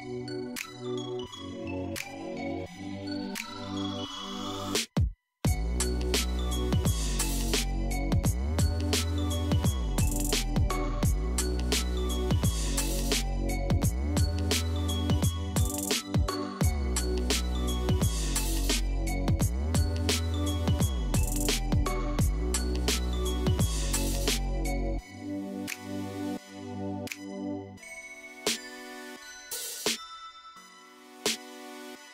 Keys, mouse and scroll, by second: 3.0-6.1 drag, 9.0 click, 10.1 scroll up 4, 10.7-11.6 middle drag, 11.6-12.5 scroll up 4, 12.5-14.2 scroll down 1, 14.8-17.7 drag, 17.7-18.1 scroll down 1, 18.1-19.4 middle drag, 19.4 click, 20.7 KP_1, 23.0-24.2 scroll down 8, 24.2-26.9 scroll up 4, 26.9-28.9 drag, 28.9-30.2 scroll down 1, 30.3 click, 30.9 scroll down 1, 32.0 scroll up 2.